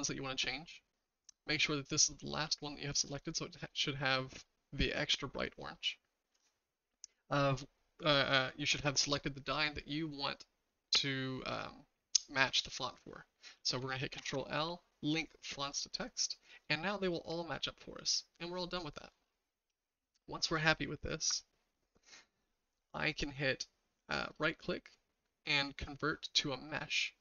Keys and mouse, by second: 2.1 shift+click, 3.8-4.4 shift+middle drag, 5.7-6.3 shift+middle drag, 14.2 ctrl+l, 16.8-19.0 shift+middle drag, 24.3-26.8 right drag.